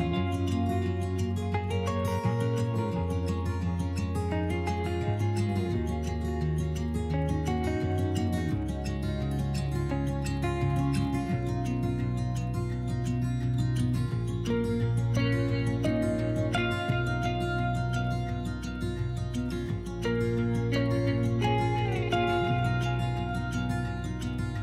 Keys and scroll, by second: 5.1 2, 5.4 s, 15.5 3, 23.8 s.